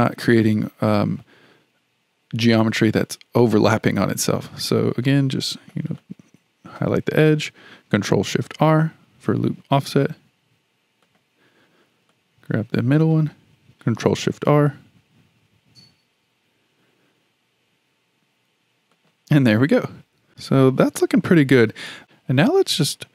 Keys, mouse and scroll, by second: 5.4 click, 6.0 drag, 8.4 ctrl+shift+r, 12.1 click, 14.3 ctrl+shift+r, 20.6-22.0 middle drag, 22.0 2.